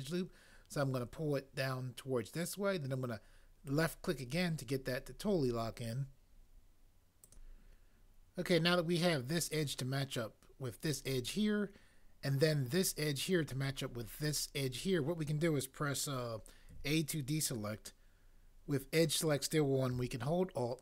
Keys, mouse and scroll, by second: 16.7 a.